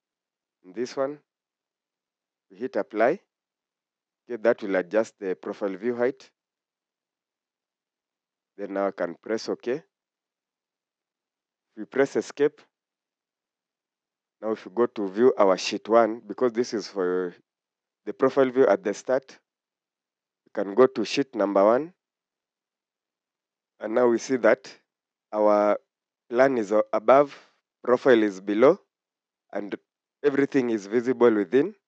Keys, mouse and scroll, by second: 11.7 Escape, 13.2 Escape, 17.8 scroll up 1, 19.7 scroll down 1, 28.9 scroll down 1.